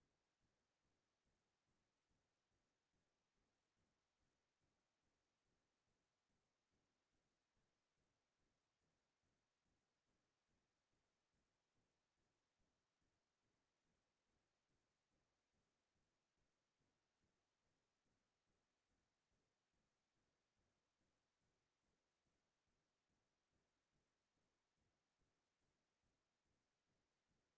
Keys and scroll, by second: 22.4 ctrl+v, 22.8 ctrl+Return.